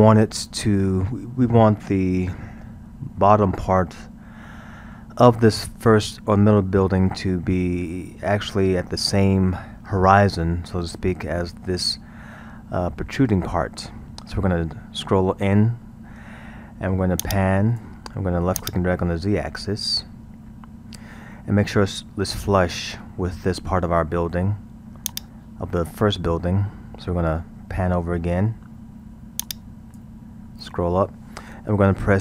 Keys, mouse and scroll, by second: 1.8-2.5 middle drag, 2.5-3.2 scroll, 3.2-6.3 middle drag, 6.3-7.2 scroll, 14.6 scroll, 17.2-21.6 drag, 25.1-26.3 drag, 26.3-26.7 scroll, 29.4-30.5 drag, 30.5-32.2 scroll.